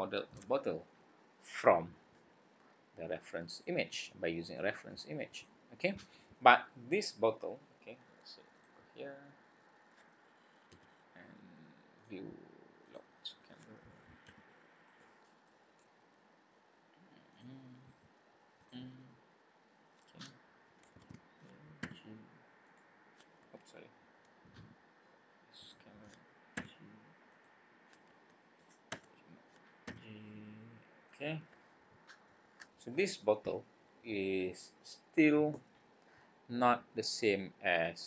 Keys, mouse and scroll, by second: 3.5 click, 4.4 click, 4.9 click, 5.3 click, 6.3 click, 7.6 scroll down 2, 8.5 click, 10.7 n, 11.9 click, 12.8 click, 14.3 g, 17.3 click, 18.6 click, 21.0 alt+a, 21.8 g, 22.6 right click, 25.6 click, 26.5 g, 27.3 right click, 28.9 Tab, 29.3 scroll down 2, 29.9 g, 31.3 scroll up 2, 32.2 scroll down 2.